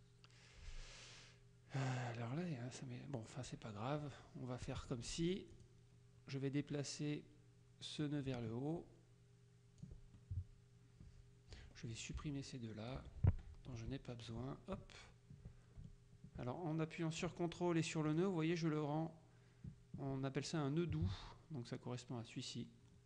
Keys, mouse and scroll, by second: 4.3 click, 5.6 click, 8.1-10.4 ctrl+drag, 11.6-13.5 drag, 12.3 Delete, 13.1 Delete, 14.3 ctrl+click, 18.1 ctrl+click.